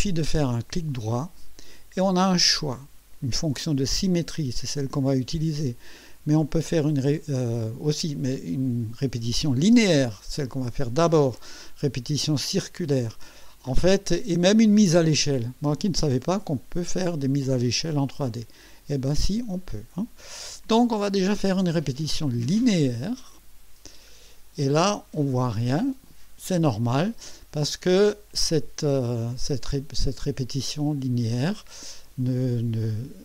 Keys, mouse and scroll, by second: 0.9 right click, 22.5 click, 24.3-24.6 scroll down 1, 24.8 scroll down 1.